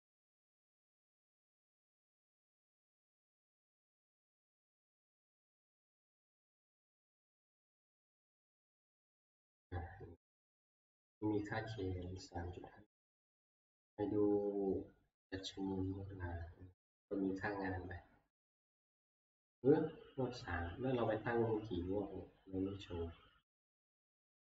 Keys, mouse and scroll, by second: 12.2-20.5 drag, 23.9 click.